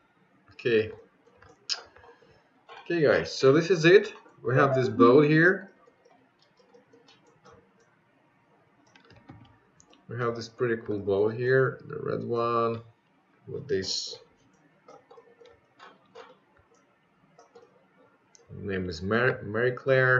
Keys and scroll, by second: 8.2 ctrl+z.